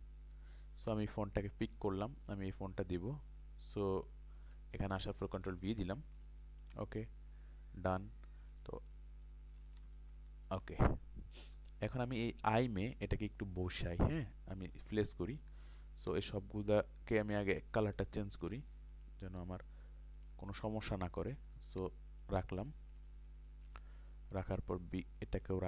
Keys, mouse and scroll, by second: 0.9 ctrl+c, 2.2 click, 4.4 click, 5.2 ctrl+v, 5.8 ctrl+space, 5.9 click, 9.3 alt+shift+click, 9.9 ctrl+space, 9.9-16.7 drag, 18.0 i, 18.9 click, 22.7 ctrl+space, 22.8 ctrl+click, 23.5-25.6 ctrl+drag.